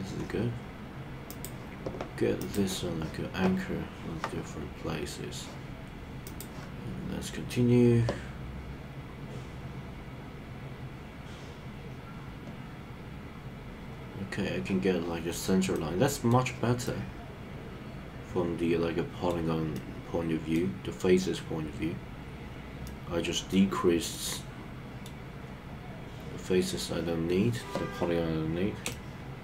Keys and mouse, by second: 1.3 click, 6.3 click, 15.7 middle click, 16.8-19.3 middle drag, 19.7 middle click, 22.8 middle click, 24.1 middle click, 28.9-29.4 shift+middle drag.